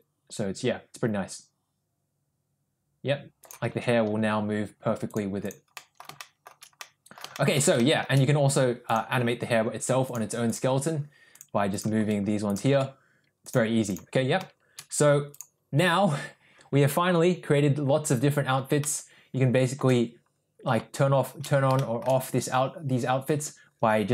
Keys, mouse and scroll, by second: 4.1 ctrl+z, 5.1 click, 5.8 middle drag, 6.2 shift+middle drag, 6.8-7.2 middle drag, 7.4 shift+middle drag, 7.8 shift+middle drag, 10.3 click, 11.4 click, 11.8 click, 12.0 g, 13.1 ctrl+z, 13.5-14.0 drag, 15.3 click, 18.8-19.8 shift+middle drag, 21.8 shift+middle click.